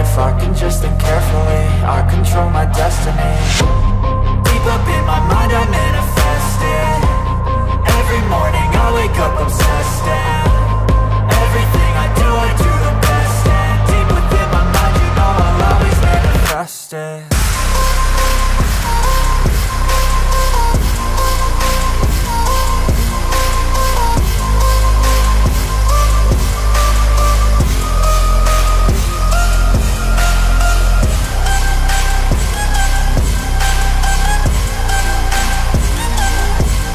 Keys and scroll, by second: 17.6 ctrl+j, 28.6 ctrl+i.